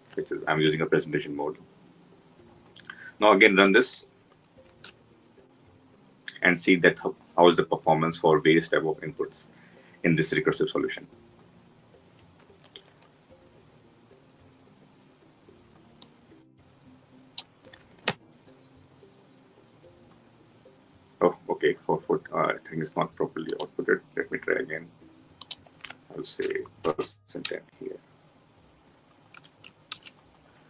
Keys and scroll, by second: 4.5 ctrl+shift+F10, 23.7 ctrl+F2, 29.1 ctrl+s, 29.7 ctrl+alt+l.